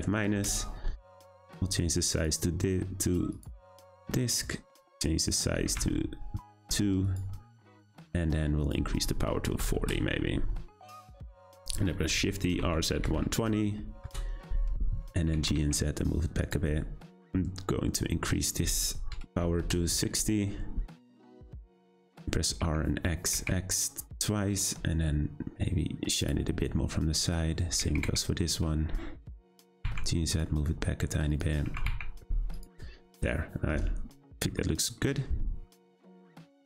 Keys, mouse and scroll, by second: 2.1-3.1 drag, 3.3-4.9 drag, 5.2-7.1 drag, 8.6-11.7 drag, 12.1 shift+d, 15.2 g, 17.1 click, 18.4-21.5 drag, 21.9 click, 22.5 r, 27.1 click, 27.7 r, 29.5 g, 31.3 click, 31.7 g, 33.5 scroll down 2, 34.6-35.6 middle drag, 35.6-36.1 scroll down 3, 36.1-36.6 shift+middle drag.